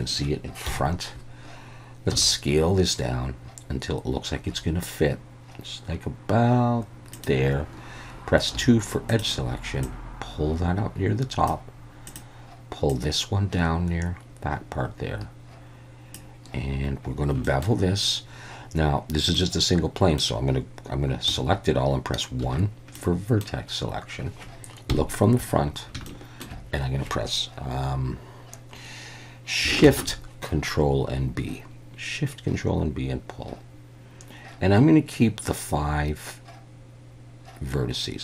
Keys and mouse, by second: 0.7 KP_1, 2.1 s, 7.1 click, 8.5 2, 9.1 click, 9.8-11.5 drag, 12.9-16.1 drag, 17.4 shift+middle click, 19.3 middle click, 21.3 a, 22.4 1, 23.0 middle click, 24.9 KP_1, 26.1 shift+middle click, 29.8 ctrl+shift+b.